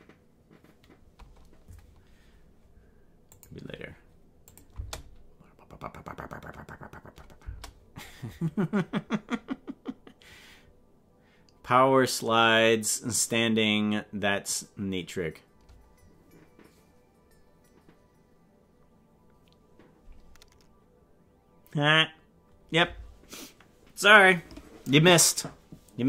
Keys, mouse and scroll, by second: 4.6 click, 4.8 space, 7.5 space.